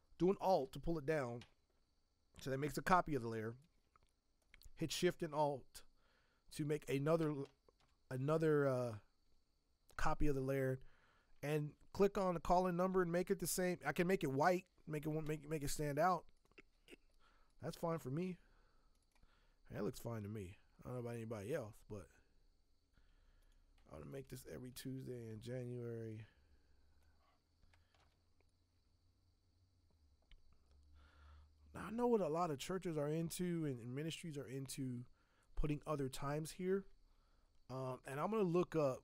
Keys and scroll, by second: 0.9 ctrl+t, 7.8 v, 24.7 ctrl+t, 27.9 v, 38.9 alt+Tab.